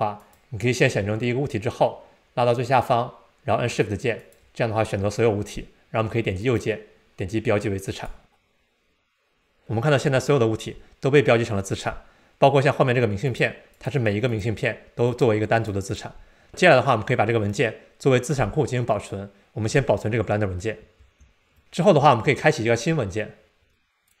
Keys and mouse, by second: 4.2 shift+click, 6.4-10.1 right drag, 15.1 click, 21.0 super+s, 23.7-24.2 drag.